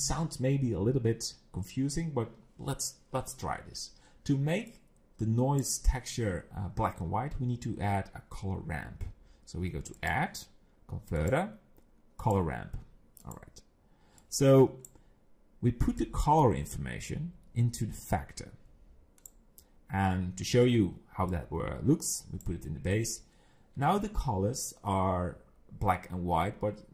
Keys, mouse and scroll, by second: 4.7 click, 10.0 click, 14.2 click, 16.0 click, 21.3 click.